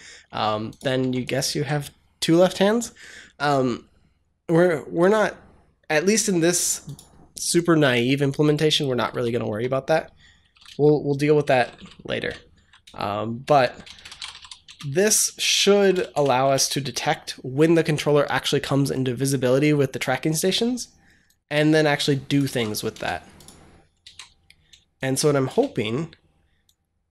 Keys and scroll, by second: 0.9 Tab, 1.4 ctrl+s, 9.0 Return, 10.0-12.1 typing, 12.4 Down, 13.3-16.7 typing, 22.4 ctrl+c, 22.8 BackSpace, 23.9 ctrl+v, 25.4 BackSpace.